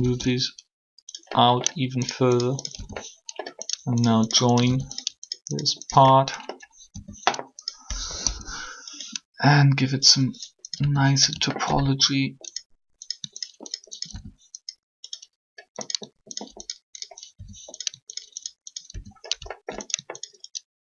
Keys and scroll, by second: 6.8 shift+f, 9.4 3.